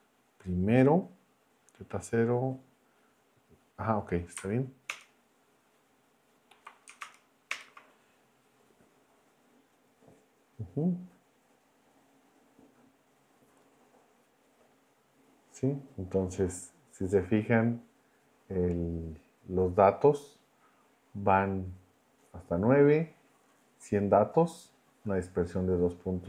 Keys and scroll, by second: 4.9 ctrl+Return, 7.0 shift+Return.